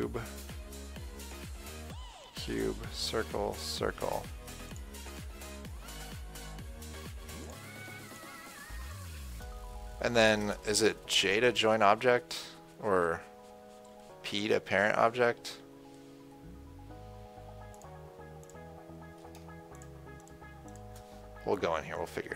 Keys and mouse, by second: 0.2-11.7 drag, 11.7 j, 14.6 p, 18.1-22.3 drag.